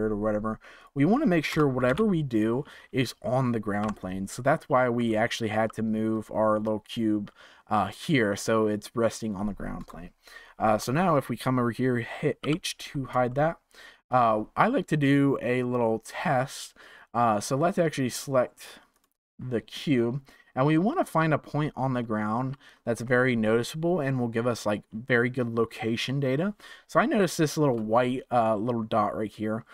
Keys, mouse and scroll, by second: 0.7-3.8 drag, 3.8 KP_1, 4.5-4.9 scroll up 3, 4.9 click, 5.5 g, 9.8 KP_0, 10.8 click, 12.4 h, 13.2-16.4 shift+middle drag, 18.9 click, 21.4-22.0 scroll up 3, 22.0-25.1 shift+middle drag, 26.9-27.3 scroll up 4, 27.3-29.3 shift+middle drag, 29.3 scroll down 2.